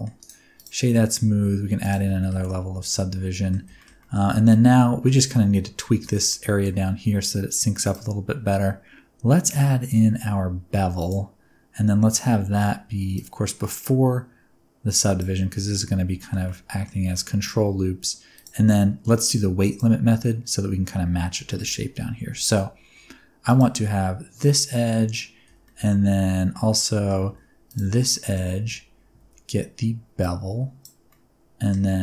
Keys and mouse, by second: 0.1 click, 1.8 click, 2.1 shift+middle click, 2.3-3.4 middle drag, 3.7 shift+middle click, 3.9 middle drag, 4.7 middle drag, 6.0 shift+middle click, 6.2 middle click, 7.8-11.0 drag, 13.1-15.1 drag, 16.1 shift+middle click, 16.4 middle click, 17.0-17.4 middle drag, 18.3-19.7 drag, 21.4 shift+middle click, 21.9 Tab, 24.3 middle click, 25.4 2, 25.6 middle click, 26.7 middle click, 27.6 alt+shift+click, 28.1 middle click, 28.5 alt+z, 29.1 alt+z, 30.2 click, 31.0-31.7 middle drag.